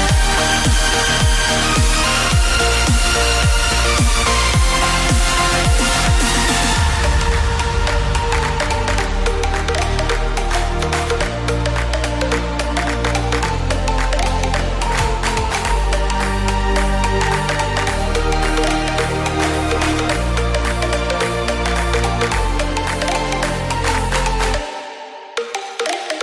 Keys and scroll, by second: 0.6-4.8 typing, 3.7 Return, 6.1-7.8 typing, 7.2 Return, 8.2 Left, 8.4 ctrl+v, 9.8 F5, 14.4 Return.